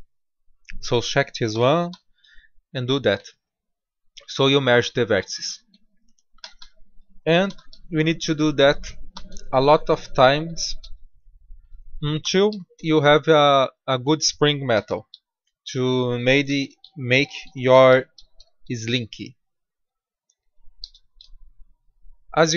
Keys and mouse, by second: 1.4 g, 6.3 a, 6.5 a, 7.4 shift+d, 9.0 g, 10.7 a, 10.8 a, 11.1 click, 12.4 shift+d, 14.6 g, 16.3 a, 16.5 a, 17.8 shift+d, 20.7 g.